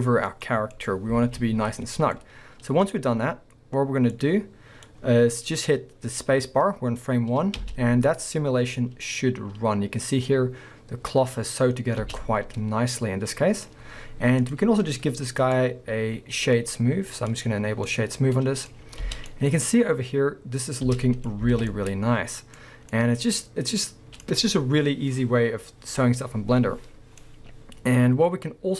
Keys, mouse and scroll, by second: 0.1 scroll down 1, 1.2 alt+a, 2.0 scroll down 2, 4.2-12.3 drag, 7.6 space, 12.3-14.4 middle drag, 13.7-14.4 scroll up 2, 14.4 click, 15.4-17.9 drag, 17.7 scroll down 2, 17.9-28.7 middle drag, 18.8 scroll up 2, 19.0 space, 21.3 scroll up 2, 21.5 alt+a.